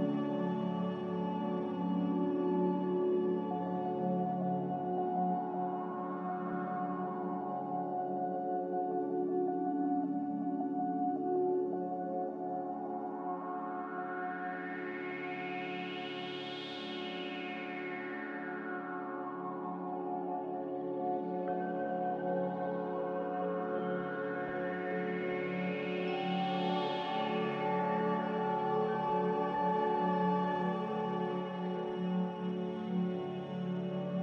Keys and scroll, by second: 4.7 ctrl+z, 6.9 g, 12.0 z, 15.1 z, 17.0 typing, 17.3 Return, 18.2-19.0 typing, 22.1 typing, 22.4 Return.